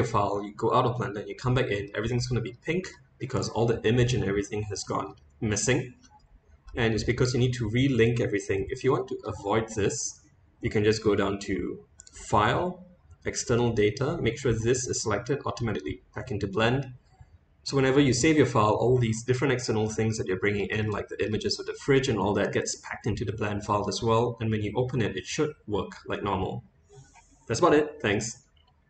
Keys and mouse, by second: 1.5-1.8 middle drag, 2.6-2.9 middle drag, 4.1-4.8 middle drag, 6.0 middle click, 6.2 click, 12.0-18.5 drag, 20.1-20.5 middle drag, 20.9-21.2 shift+middle drag, 21.9-22.3 middle drag.